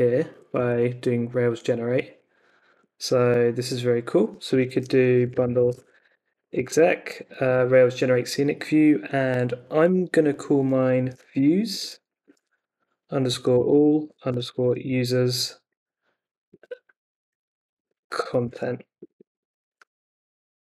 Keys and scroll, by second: 0.5 super+c, 2.5 super+Tab, 4.9-7.4 typing, 10.7-14.8 typing, 16.5-20.2 typing.